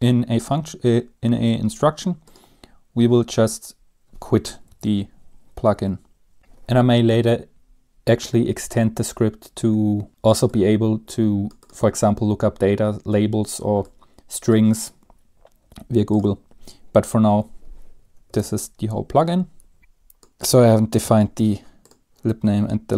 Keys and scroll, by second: 4.8 Return, 4.9 Tab, 6.4 Up, 6.4 ctrl+s, 6.4 Down, 6.4 typing, 15.8 BackSpace, 17.4 Delete, 18.5 ctrl+s.